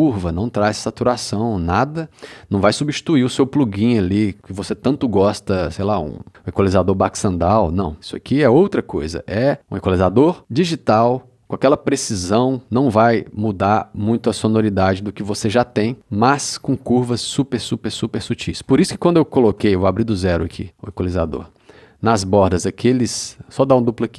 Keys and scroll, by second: 19.5 c.